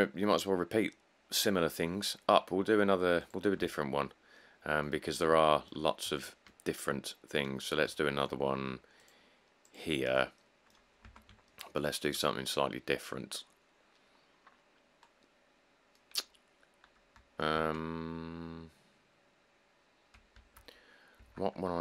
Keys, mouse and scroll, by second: 5.2 middle click, 5.3 middle click, 6.1 middle click, 6.1 middle click, 7.8 middle click, 7.9 middle click, 11.2 Tab, 16.7 middle click, 17.7 Tab, 20.6 Tab, 21.4 Tab.